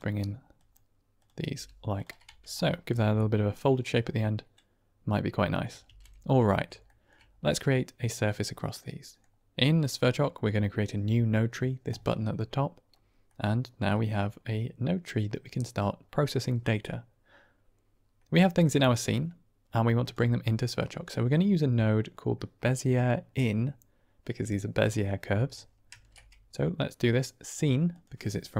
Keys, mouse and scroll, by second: 0.5 click, 1.1 click, 1.4 g, 1.8 click, 2.2 Tab, 2.4-2.8 middle drag, 3.7-4.4 middle drag, 5.8 ctrl+space, 6.7 shift+middle drag, 8.1-9.1 middle drag, 11.8 click, 13.2 middle click, 19.9 drag, 25.8 shift+a.